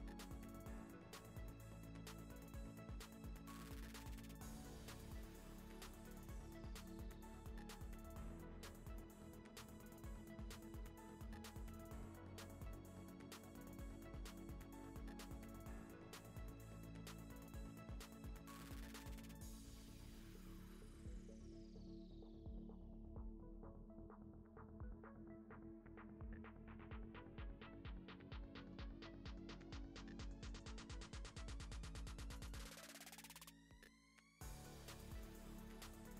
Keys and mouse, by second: 0.5 right click, 1.0 click, 1.8 click, 2.4 click, 2.7 middle click, 4.2 shift+middle click, 4.5 click, 4.6 Tab, 4.7 2, 4.8 click, 5.3-6.4 middle drag, 6.9 Tab, 6.9 e, 7.2 middle click, 7.8 middle click, 8.6 Tab, 8.7-12.7 typing, 10.0 Tab, 10.1 right click, 10.4 Tab, 10.6 middle click, 11.8 middle click, 13.5 middle click, 14.0 middle click, 14.3 g, 15.0 shift+middle click, 15.5 middle click, 15.5 2, 15.6 g, 16.1 middle click, 16.4 shift+middle click, 16.7 click, 16.9 g, 17.3 middle click, 17.7 Tab, 18.0 ctrl+s, 18.7 middle click, 19.4 click, 19.5 Tab, 19.6 middle click, 19.8 3, 20.0 middle click, 20.4 shift+middle click, 20.6 middle click, 21.7 middle click, 21.8 shift+middle click, 22.1-26.7 typing, 22.6 click, 23.5 Tab, 23.7 click, 23.8 Tab, 24.1 click, 24.7 ctrl+e, 27.3 middle click, 27.5 shift+middle click, 27.9 ctrl+z, 27.9 ctrl+z, 28.2 ctrl+z, 29.2 ctrl+r, 30.0 g, 30.5 g, 31.0 3, 31.5 x, 31.9 middle click, 32.4 click, 32.8 middle click, 32.8 a, 33.1 e, 34.4 middle click, 34.6 2, 34.7 alt+click, 35.2 ctrl+x, 35.7 2, 35.7 click, 35.8 middle click, 36.0 g.